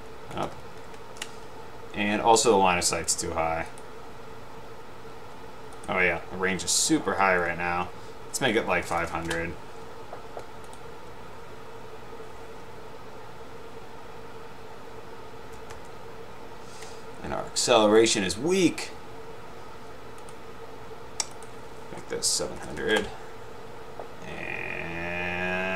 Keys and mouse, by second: 0.5 Down, 0.6 Right, 1.1 Up, 3.9 click, 9.0 0, 9.2 0, 10.8 click, 13.4 Up, 16.1 Up, 18.0 click, 21.4 click, 22.4-23.2 typing.